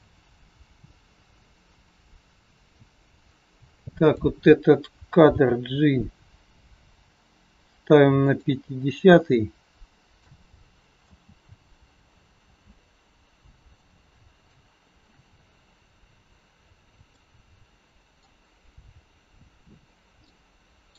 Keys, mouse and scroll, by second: 3.7 click, 5.2 g, 9.2 click, 11.0 space, 12.4 space, 13.8 click, 15.6-16.6 scroll up 2, 17.0 middle click, 20.2 middle click.